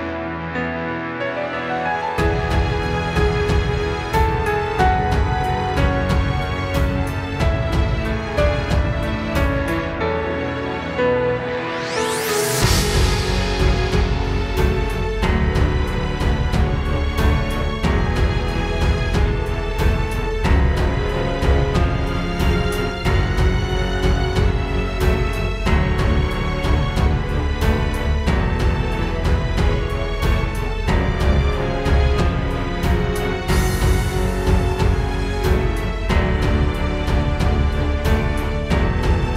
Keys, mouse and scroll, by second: 4.4 click, 5.5 click, 5.7 click, 8.1 BackSpace, 16.2 click, 20.0 click, 21.1 click, 22.2 click, 24.2 click, 26.1 right click, 27.7 shift+right click, 28.7 right click, 29.2 middle click, 30.4 KP_Decimal, 31.4 scroll down 1, 31.5 middle click, 32.5 shift+right click, 33.4 shift+right click, 34.5 middle click, 34.5-35.1 scroll down 1, 35.2-36.3 scroll down 2, 36.4 KP_0, 37.9 click.